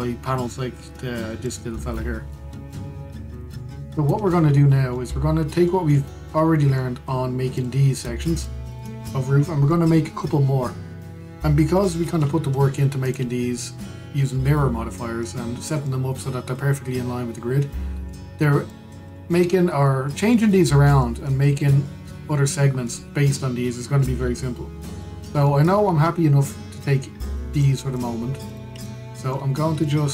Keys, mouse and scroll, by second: 2.1 click, 3.3-4.0 middle drag, 4.0 drag, 4.2-5.2 middle drag, 5.2-5.6 scroll down 2, 5.6-6.6 middle drag, 6.6-6.9 scroll up 2, 6.9-8.2 middle drag, 8.2 click, 9.0 click, 9.4 drag, 9.8-13.7 middle drag, 13.7 click, 14.3-20.7 middle drag, 20.7 scroll, 20.8-25.3 middle drag, 25.3-25.7 scroll down 1, 25.7-26.3 middle drag, 26.3 scroll up 1, 27.5-28.2 middle drag, 28.2 click, 28.6 shift+drag, 29.1 shift+click, 29.5-30.1 middle drag.